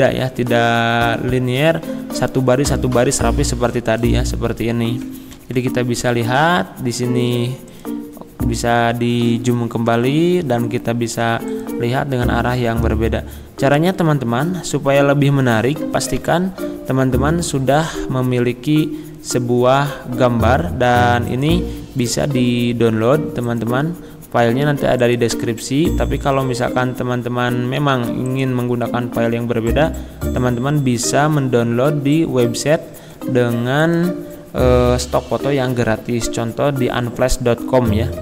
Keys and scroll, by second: 5.6 Left, 7.9 Left, 9.9 Left, 12.9 Left, 16.2 Escape.